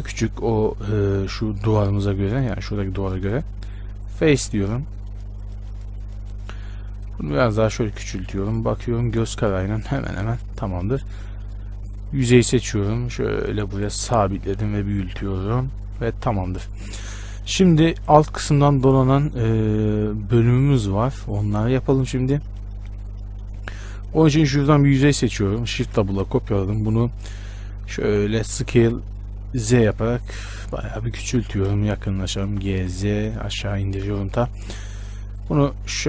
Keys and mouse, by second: 4.2-12.6 drag, 5.3-7.2 middle drag, 5.3-25.9 right drag, 8.9-12.9 middle drag, 12.9-24.3 drag, 24.3-25.9 middle drag, 26.0 shift+d, 28.0 s, 28.2 z, 28.8 s, 32.0 shift+space, 32.6 g, 35.2 click, 35.8-36.0 middle drag.